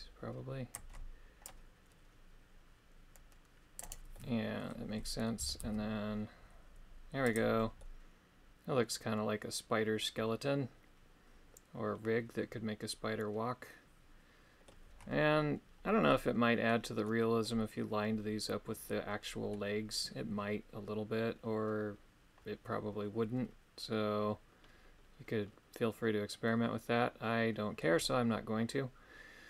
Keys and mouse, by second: 1.4 click, 3.8 right click, 4.1 middle click, 5.4 g, 7.8-14.7 middle drag, 16.1 middle click, 17.0 middle click, 19.5-27.9 middle drag, 28.0-29.4 middle drag.